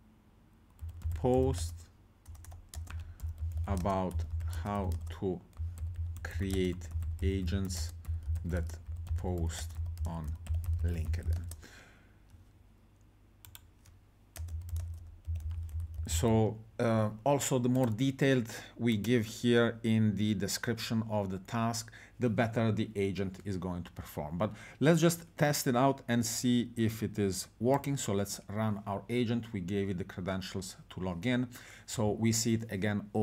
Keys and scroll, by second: 0.6-11.8 typing, 14.3-16.6 typing.